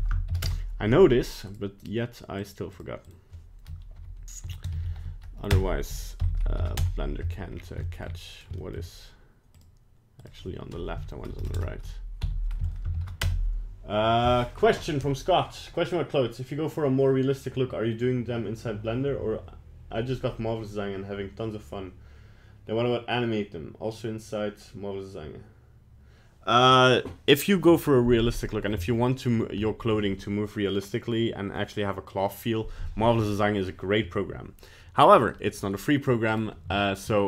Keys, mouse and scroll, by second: 1.5 right click, 1.8 right click, 2.4 click, 4.8 shift+Left, 7.5 scroll down 2, 7.9 shift+middle click, 8.3 right click, 8.6 shift+middle click, 9.5 click, 11.5 BackSpace, 28.7-29.0 scroll up 3, 29.0 middle click, 29.3 scroll down 2, 29.6 middle click, 35.0 middle click, 35.4 middle click, 36.3 right click, 36.9 shift+middle click, 37.1 shift+middle click.